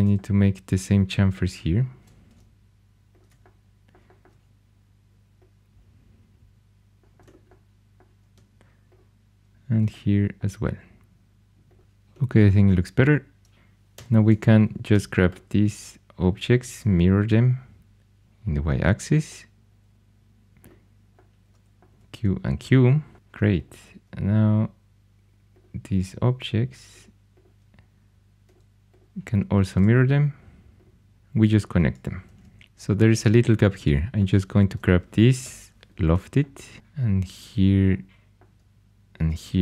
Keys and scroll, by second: 13.9 4, 16.5 alt+x, 21.8 typing, 29.6 alt+x, 31.1 4, 32.2 shift+super+e, 32.6 3, 35.4 i.